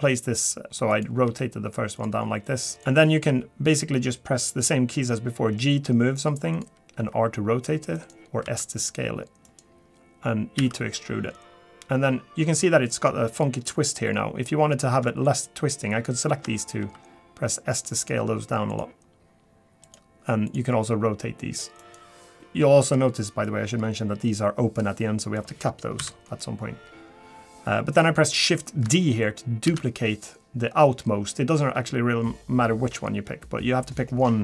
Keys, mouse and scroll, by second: 0.6 click, 0.9 click, 1.2 g, 2.7 click, 2.8 click, 2.8 shift+middle click, 3.2 g, 7.0 r, 8.4 s, 10.6 e, 15.2 shift+click, 16.8 s, 19.8 click, 20.5 click, 20.9 r, 22.2 scroll down 2, 22.3 click, 22.3 g, 22.4 middle click, 23.5-24.0 scroll up 3, 25.0 middle click, 26.0 KP_7, 26.8-27.8 scroll down 4, 29.7 shift+d.